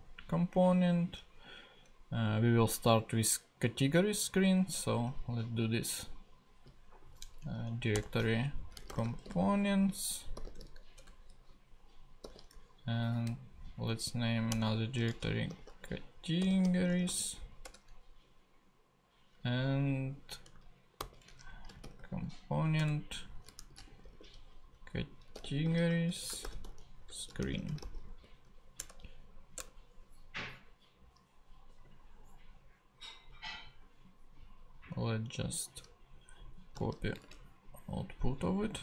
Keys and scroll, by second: 6.5 super+n, 7.4 super+Down, 7.9 Return, 8.5-11.0 typing, 11.5 super+Return, 12.2 super+n, 13.9 Down, 14.5 Return, 14.8-17.5 typing, 17.6 Return, 21.0 super+n, 21.5-22.3 typing, 23.4-28.5 typing, 28.8 Return, 36.8 super+c, 37.2 ctrl+super+Tab.